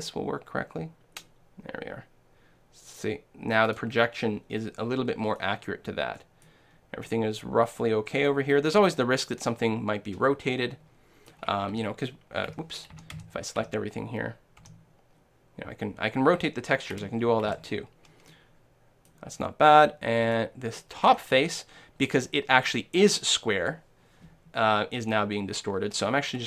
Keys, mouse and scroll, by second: 3.8-5.7 drag, 5.7 right click, 5.9-9.0 middle drag, 9.5 middle click, 11.7 r, 13.0 a, 13.2 a, 13.6 r, 14.6 r, 17.5 a, 18.3-25.6 middle drag, 19.7 click, 21.0-25.6 drag.